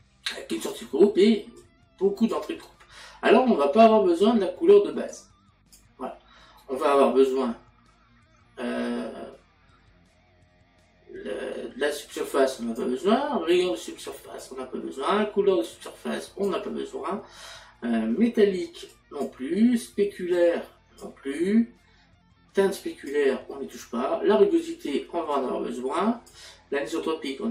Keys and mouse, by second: 1.6 click, 5.1 click, 12.5 click, 14.0 click, 16.2 click, 18.9 click, 20.3 click, 22.8 click, 25.3 click.